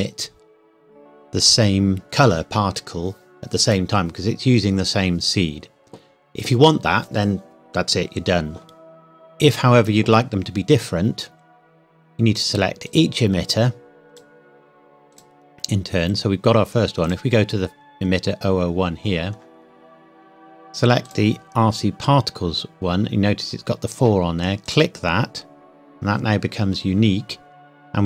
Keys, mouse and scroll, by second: 9.5 click, 12.4 click, 19.1 scroll up 1, 21.1 click, 24.7 click.